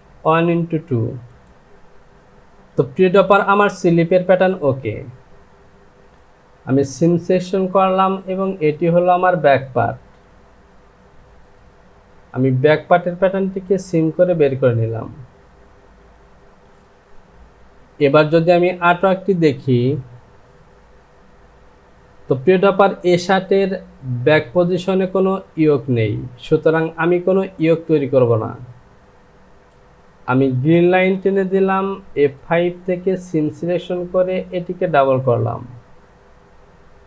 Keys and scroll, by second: 1.5 j, 6.0 ctrl+z, 16.6 Home.